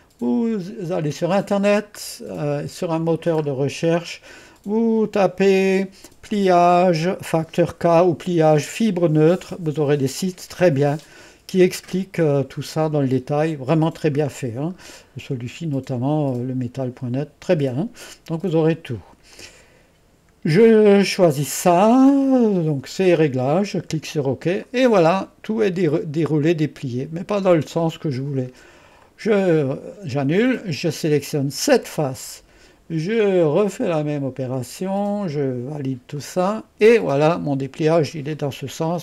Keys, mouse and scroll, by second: 3.0-6.6 scroll down 2, 8.5-10.0 scroll down 2, 11.1 scroll down 1, 19.4 click, 23.6 click, 24.7-28.2 drag, 29.1 click, 29.7-30.9 drag, 31.3 click, 33.9 click, 36.2 click, 37.2 click, 38.4-39.0 drag.